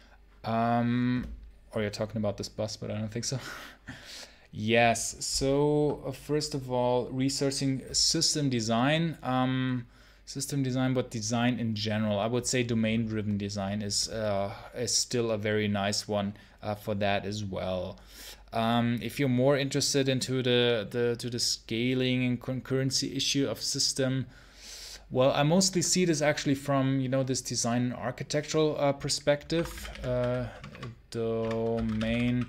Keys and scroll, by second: 29.4 ctrl+t, 29.5-32.4 typing.